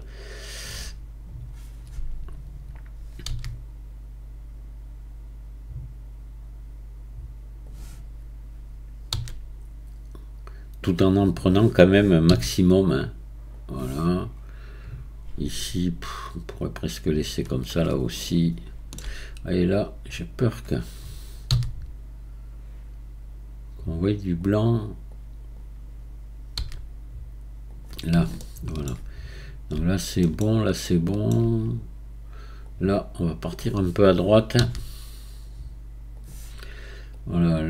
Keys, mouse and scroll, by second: 0.6 click, 3.3 g, 9.1 s, 12.9 g, 16.6 click, 18.2-19.6 shift+middle drag, 19.6 drag, 21.5 g, 25.1 click, 26.6 g, 28.4-32.7 shift+middle drag, 32.7 drag, 34.6 g, 37.1 click.